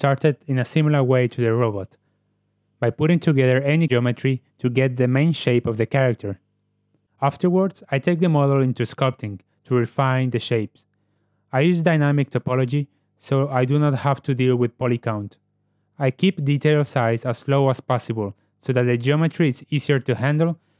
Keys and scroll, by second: 0.1 g, 5.9 ctrl+w, 7.1 n, 7.4 t, 8.7 KP_Decimal, 8.8 ctrl+v, 9.0 ctrl+w, 10.0 ctrl+w, 17.0 ctrl+w.